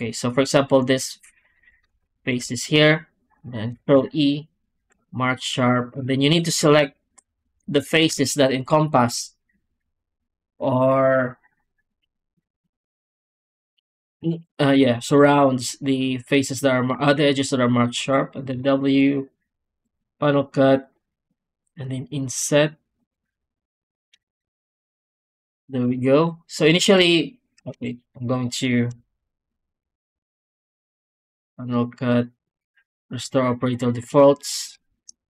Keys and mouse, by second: 2.0 ctrl+click, 3.6 ctrl+e, 5.8 3, 6.1 click, 7.6 ctrl+shift+click, 16.4 click, 18.4 w, 24.2 alt+shift+z, 26.9 ctrl+z, 27.7 shift+q, 30.0 w, 34.7 ctrl+z, 35.1 Tab.